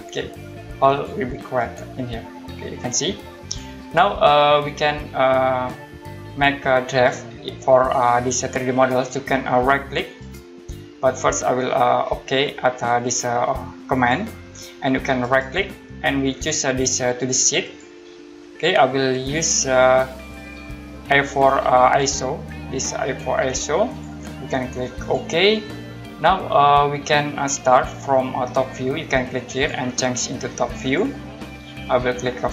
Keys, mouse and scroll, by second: 1.5 middle click, 1.6 right click, 10.2 right click, 13.9 click, 15.2 right click, 17.6 click, 19.7 click, 23.9 click, 29.5 click.